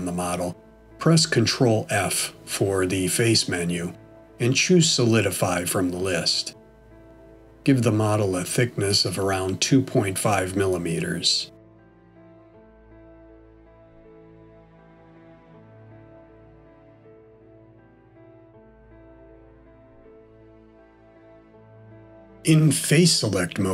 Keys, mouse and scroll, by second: 4.3 ctrl+f, 8.0 click, 12.4-13.2 scroll up 1, 13.2 middle click, 16.7 scroll down 1, 17.4 middle click, 20.0 scroll up 1, 21.0 middle click, 23.0 3.